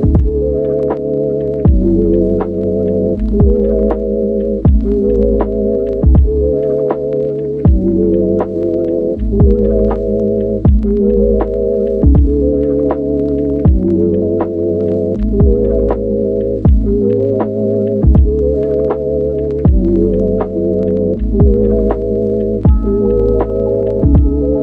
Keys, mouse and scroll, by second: 0.0-5.2 typing, 1.1 click, 6.6 s, 7.4 g, 7.4 z, 8.8 click, 9.2 Tab, 9.4 ctrl+r, 10.1 click, 10.3 ctrl+r, 11.0 click, 11.7 KP_1, 12.6 ctrl+r, 15.0 middle click, 15.2 shift+middle click, 15.9 e, 17.0 click, 19.7 a, 20.0 s, 22.0 shift+middle click, 22.8 a, 23.0 s, 23.0 x, 23.5 click, 24.5 shift+right click.